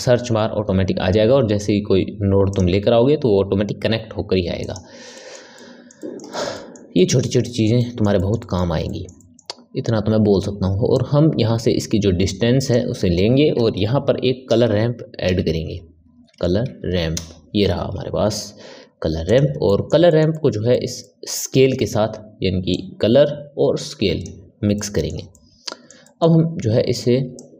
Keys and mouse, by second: 5.1-10.8 middle drag, 10.8 click, 19.6-22.6 middle drag, 22.6 click, 24.7-27.3 middle drag, 27.3 click.